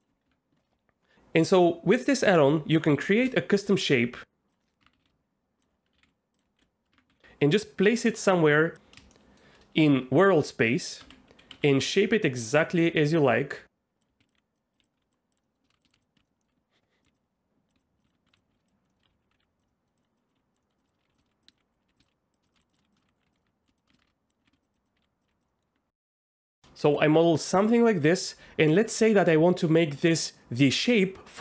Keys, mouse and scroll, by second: 0.2 Tab, 3.0 shift+a, 4.6 click, 4.8 Tab, 4.9-7.1 typing, 6.9 Tab, 9.1-9.4 shift+middle drag, 11.0 Tab, 11.5 s, 13.0 right click, 14.1-25.3 typing, 15.3 click, 15.4 middle click, 15.7 shift+middle click, 16.2 ctrl+z, 16.2 middle click, 16.4 click, 17.0 click, 18.7 click, 18.9 middle click, 19.7 click, 19.8 middle click, 20.0 click, 20.2 click, 20.6 middle click, 22.4 shift+click, 22.9 click, 23.4 middle click, 23.9 ctrl+z, 25.5 middle click, 25.7 Tab, 26.2 middle click, 26.5 shift+middle click, 26.8 g.